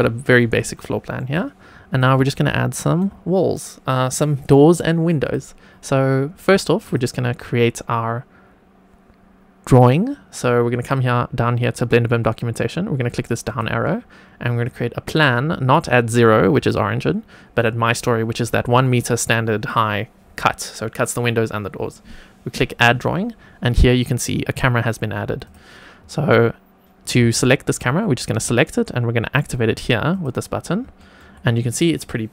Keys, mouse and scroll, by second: 0.7 shift+middle click, 1.8 click, 2.3 shift+right click, 5.1 click, 6.8 click, 13.4 click, 14.6-17.6 drag, 22.7 click, 23.8-24.9 scroll down 5, 24.9-25.4 scroll up 2, 25.4 click, 27.3-27.8 shift+middle drag, 30.0 click, 30.9 shift+middle click.